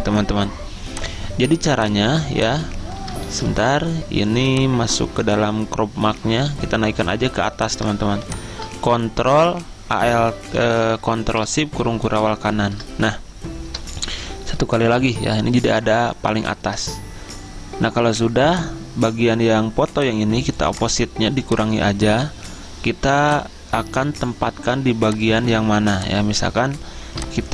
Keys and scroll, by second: 3.5 ctrl+z, 12.3 ctrl+shift+], 14.4 ctrl+shift+].